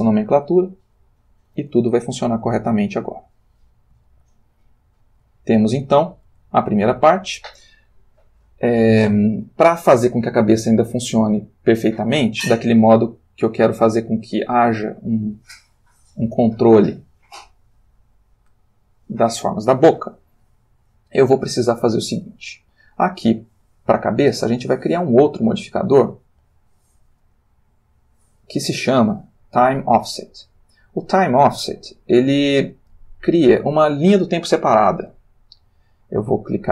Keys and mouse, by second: 1.0 click, 1.6 r, 3.2 Escape, 4.1-5.4 ctrl+middle drag, 5.7 ctrl+shift+click, 7.1 ctrl+s, 9.2-10.4 shift+drag, 11.1 ctrl+middle click, 13.0-19.9 drag, 22.7 click, 25.4 click, 28.7 click, 33.2 click, 35.7 click.